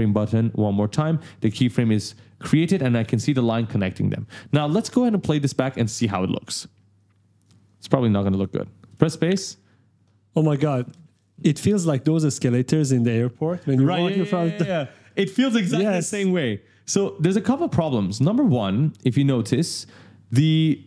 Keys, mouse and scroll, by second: 1.1-1.4 ctrl+scroll up 1, 6.7 click, 7.4 click, 8.7 space, 16.8 ctrl+scroll down 2, 17.7 click.